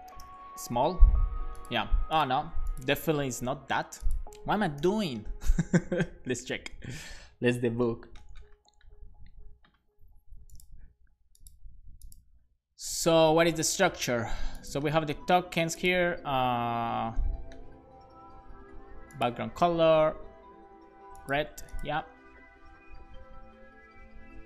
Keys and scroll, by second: 0.0-0.1 typing, 0.4 super+s.